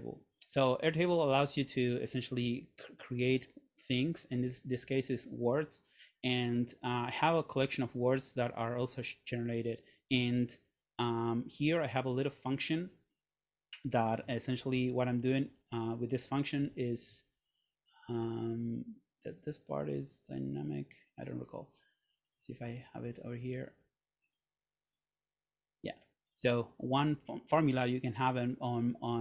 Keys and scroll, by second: 16.7 Escape.